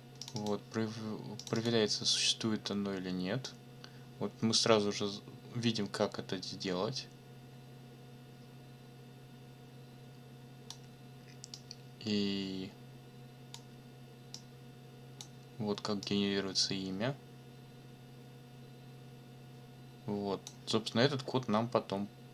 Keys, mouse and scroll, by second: 0.2 click, 1.4 click, 3.4-10.9 drag, 11.5-13.7 drag, 14.3 click, 16.0-20.6 drag.